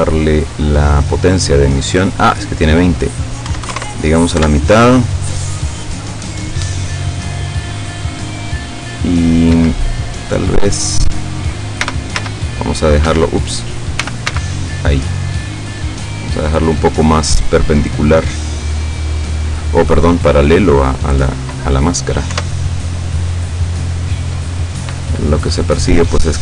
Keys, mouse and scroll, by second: 0.8 click, 1.9 click, 3.6 KP_1, 3.8 KP_0, 3.9 KP_Enter, 9.6 Escape, 10.1-11.5 drag, 11.8 r, 12.2 z, 13.1 Escape, 14.0 r, 14.3 x, 16.4 click, 17.2-19.8 drag, 22.4 F12.